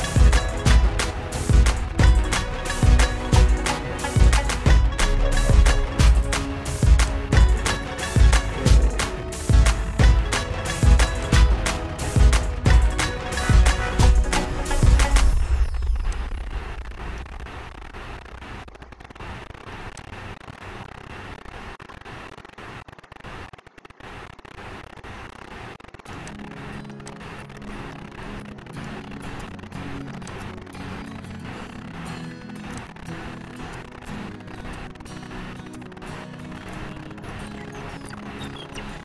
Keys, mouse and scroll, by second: 3.7 click, 7.2 click, 12.9 click, 15.1 ctrl+g, 17.5 click, 24.2 click, 26.2 click, 27.8 click, 29.1 right click, 30.4 click, 32.9 click, 37.5 click.